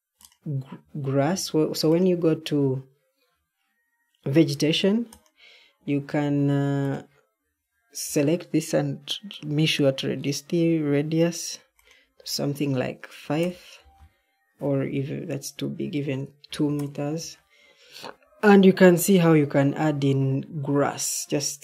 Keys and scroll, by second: 1.2 Escape, 1.2 typing, 13.2 5, 13.3 Return, 16.4 2, 16.7 Return.